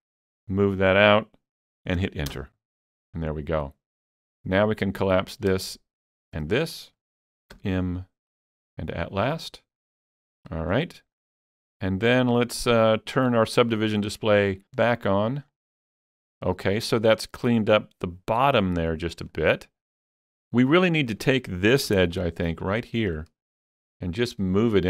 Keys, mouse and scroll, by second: 2.3 Return, 2.3 click, 5.1 Return, 5.1 click, 6.1 shift+click, 7.6 m, 8.3 shift+click, 10.5 alt+a, 10.8-11.2 scroll down 1, 11.2-14.8 middle drag, 15.5 click, 15.5 scroll down 1, 19.3-24.8 middle drag, 19.3 click, 22.4-24.8 alt+drag.